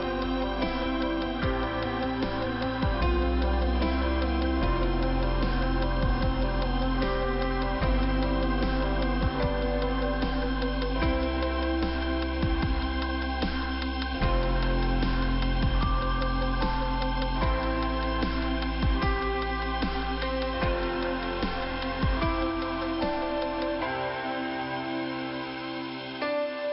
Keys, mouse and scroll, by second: 1.8 click, 1.9 click, 2.8 middle click, 3.4 middle click, 5.4 click, 5.5 click, 6.4 click, 7.4 click, 7.5 click, 8.2 click, 8.8 click, 10.4 click, 10.6 click, 11.2 click, 12.5 middle click, 13.9 click, 14.0 click, 14.6 click, 16.1 middle click, 16.9 click, 17.0 click, 17.7 click, 22.2 click, 23.1 click, 25.1 middle click, 26.3 click, 26.4 click.